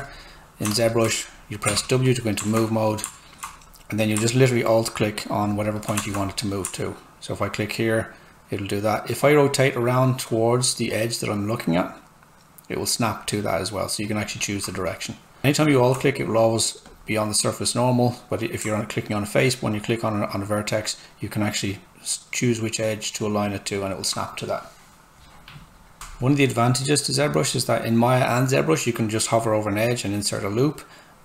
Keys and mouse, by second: 0.7 alt+click, 1.7 w, 2.0 click, 2.4 alt+right click, 5.4 alt+click, 6.1 alt+right click, 7.3 alt+click, 17.2 click, 19.9-23.9 alt+drag, 26.0 ctrl+z, 29.4 click.